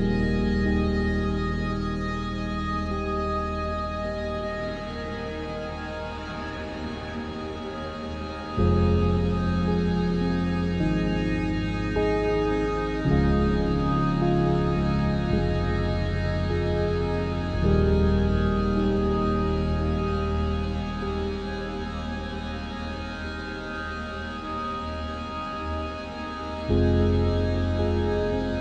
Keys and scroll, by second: 0.9 ctrl+b, 8.0 e, 13.0 Tab, 13.5 Tab, 13.7 Tab, 14.6 Tab, 19.8 Tab, 20.1 0, 22.1 n.